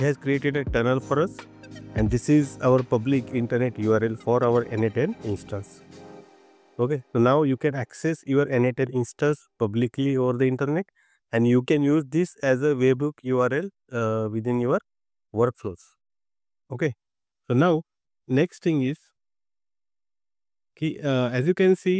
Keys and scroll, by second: 3.1 super+c, 4.6 super+c, 5.4 super+v.